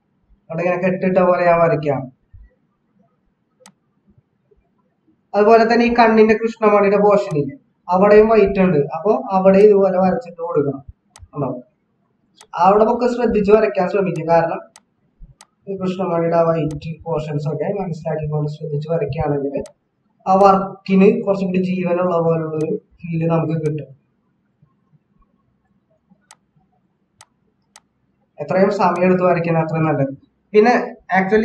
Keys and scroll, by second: 6.1 ctrl+=, 6.2 ctrl+=.